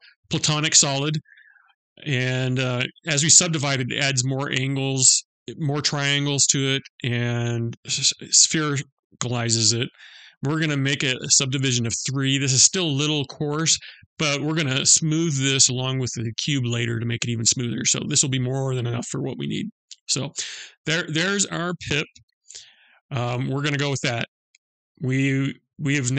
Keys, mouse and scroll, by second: 9.5 click, 10.2 click, 23.5 click, 25.0 middle click.